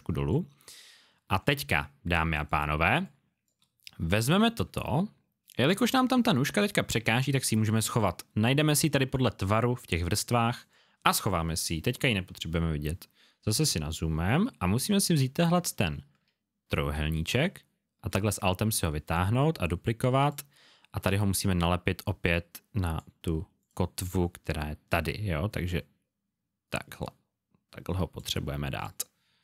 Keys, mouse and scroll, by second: 1.0 alt+scroll down 1, 13.3 alt+scroll up 1, 17.2 alt+click, 21.3 click, 28.7 click.